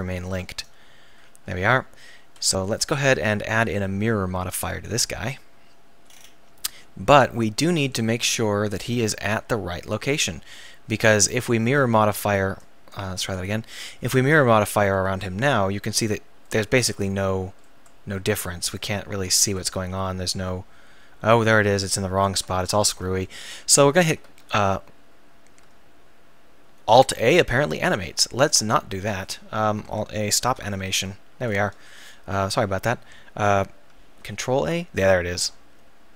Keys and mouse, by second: 0.2 Tab, 2.5 KP_1, 6.3 middle click, 7.4 middle click, 7.7 click, 8.3 click, 8.8 right click, 11.2-13.4 right drag, 14.8-17.0 middle drag, 17.7-18.1 middle drag, 18.8-21.9 drag, 22.6 ctrl+z, 23.5 drag, 24.1 alt+a, 27.2 right click, 28.4 ctrl+z, 30.4 alt+a, 30.9 ctrl+z, 34.2 ctrl+a.